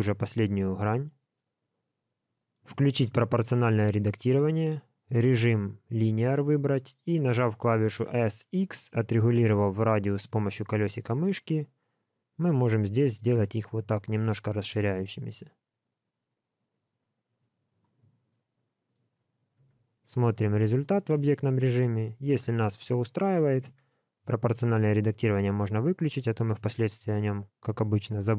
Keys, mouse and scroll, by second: 1.3 middle click, 3.6 click, 4.0 click, 4.6 click, 18.3 middle click, 19.2-19.6 scroll down 1, 19.6 Tab, 19.8 scroll down 2, 20.1 alt+middle click, 21.0 alt+a, 21.2 middle click, 23.6 Tab, 24.5 click, 26.0 Tab, 27.2-27.6 scroll down 2, 27.8 shift+middle click.